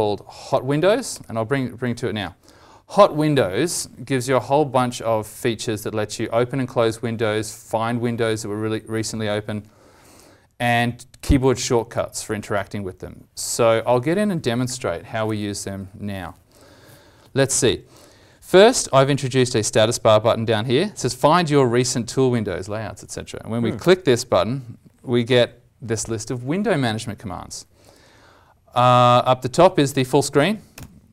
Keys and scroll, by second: 15.2 alt+Tab, 15.3 alt+Tab.